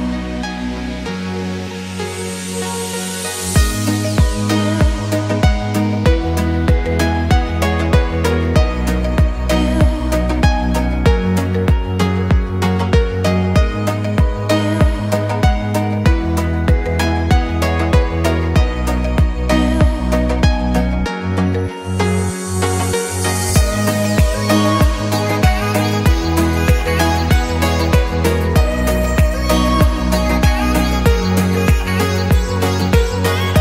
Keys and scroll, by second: 8.0 Escape, 23.2 Escape, 25.0 Escape, 27.1 Escape, 28.6 Escape, 32.7 Escape.